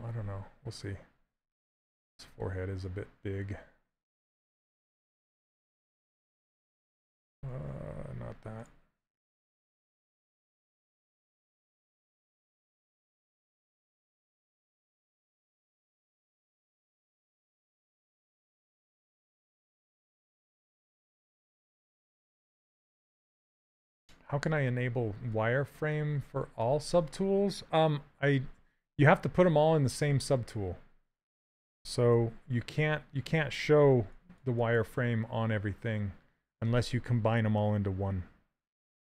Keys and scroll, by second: 4.7 s, 7.7 ctrl+z, 8.9 s, 20.3 s, 25.0 s, 32.5 shift+f.